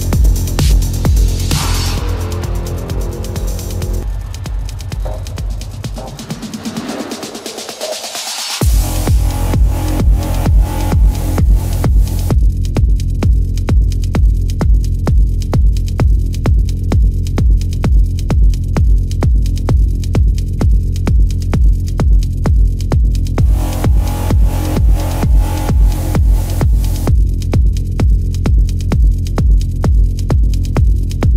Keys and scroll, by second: 2.2 ctrl+=, 2.6 ctrl+=, 8.1 ctrl+alt+z, 10.9 ctrl+=, 12.0 ctrl+=, 15.6 ctrl+-, 17.4 ctrl+alt+z, 19.3 ctrl+-, 19.6 ], 20.3 ], 20.9 ctrl+-, 21.1 ], 21.4 ctrl+-, 23.2 ctrl+-, 23.4 space, 23.7 ctrl+-, 23.9 ], 24.1 space, 24.6 ], 25.3 ctrl+alt+z, 25.6 ], 26.2 ctrl+alt+z, 31.1 ctrl+alt+z.